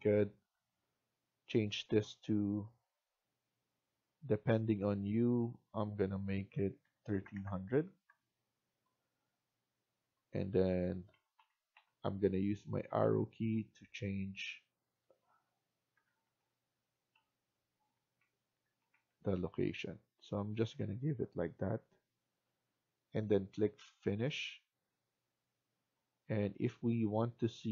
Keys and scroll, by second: 6.2-7.5 typing, 7.9 Return, 11.0 Down, 11.3 Down, 11.6 Down, 12.9 Down, 13.4 Right, 15.8 Right, 16.3 Right, 17.1 Right, 18.4 Left, 18.7 Right, 19.6 Left.